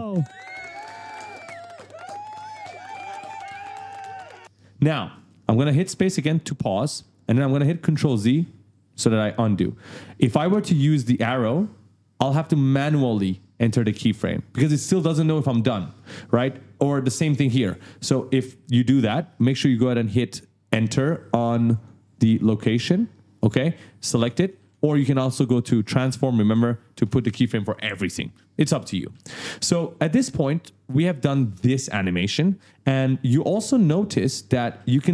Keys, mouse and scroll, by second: 5.1 space, 7.9 ctrl+z, 8.7 click, 11.6 click, 21.7 click, 22.6 Return, 24.5 ctrl+z, 25.8 click, 26.4 Return, 29.0 ctrl+z, 30.4 click, 33.4 right click, 33.4-34.7 typing.